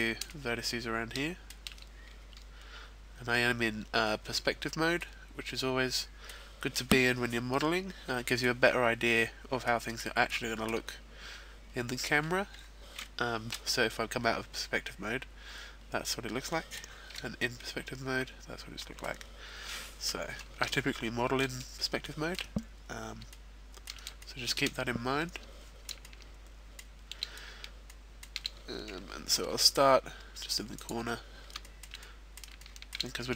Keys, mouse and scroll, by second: 0.4 shift+middle click, 2.1 scroll up 1, 2.5-3.7 scroll down 1, 3.9-5.0 scroll down 7, 5.0 middle click, 7.5 middle click, 8.6-9.4 scroll down 3, 9.6 middle click, 10.6 middle click, 11.3-12.1 scroll up 3, 12.1 scroll up 1, 13.1-13.5 scroll down 2, 13.5 KP_5, 14.8 middle click, 17.1 KP_5, 17.4 middle click, 19.2 scroll up 2, 20.6 shift+middle click, 20.6 scroll up 2, 21.5-23.1 scroll up 3, 21.9 shift+middle click, 23.1 scroll up 1, 23.3 shift+middle click, 24.5 shift+middle click, 26.6 shift+middle click, 27.8 shift+middle click, 29.6 g, 30.7 click, 31.1-31.6 scroll down 3, 31.6 shift+middle click, 31.9 middle click, 32.6 shift+middle click, 33.1-33.3 scroll up 2.